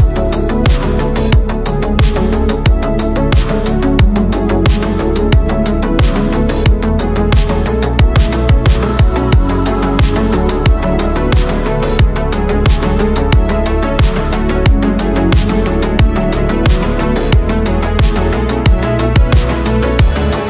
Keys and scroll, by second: 3.5 space, 4.4 ctrl+z, 8.5 space, 10.2 ctrl+z, 11.2 ctrl+z, 19.5 ctrl+z, 19.9 space.